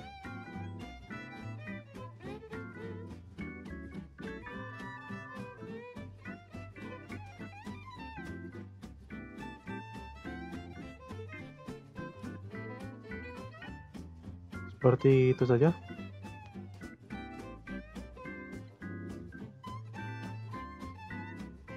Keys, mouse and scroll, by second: 2.7 click, 3.2 drag, 3.5 space, 6.2 space, 6.7 click, 7.3 drag, 7.6 space, 8.6 space, 9.5 click, 10.1 drag, 10.4 space, 12.4 space, 13.1-16.1 drag, 18.0-18.3 scroll down 7, 18.4 middle drag, 18.6 scroll up 3, 18.9 shift+s, 19.5 scroll down 1, 20.0 shift+a.